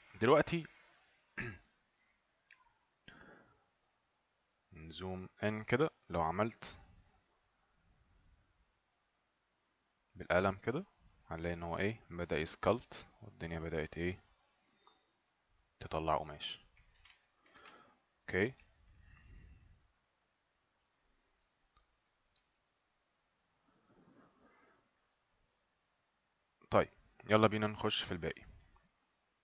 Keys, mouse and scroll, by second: 0.5 click, 4.3 ctrl+right click, 7.5 click, 11.0 right click, 14.3 click, 15.9 right click, 17.0 ctrl+z, 17.6 ctrl+z, 18.8 alt+right click, 19.7 right click, 21.6 alt+right click, 22.5 alt+right click.